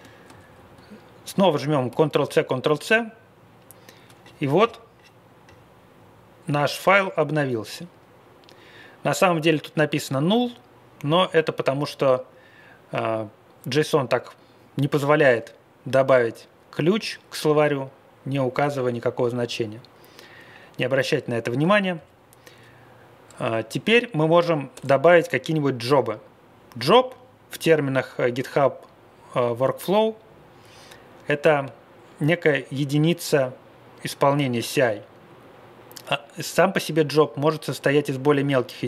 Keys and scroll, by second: 0.3 Page_Down, 0.4 Page_Down, 1.9 ctrl+c, 2.1 ctrl+c, 21.6 Down, 21.9 Left, 24.7 Return.